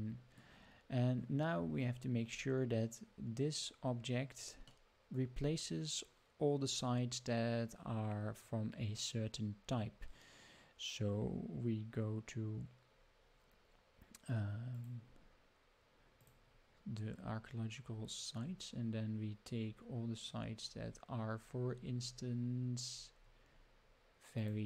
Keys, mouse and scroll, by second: 1.6 scroll down 2, 4.8 middle click, 14.7 click, 16.2 click, 16.8-17.3 scroll down 3, 17.5-18.5 scroll down 9, 18.7-19.1 scroll up 2, 19.1-19.8 scroll down 3, 20.2-23.5 scroll down 45, 23.5-23.8 scroll up 1, 24.4 click.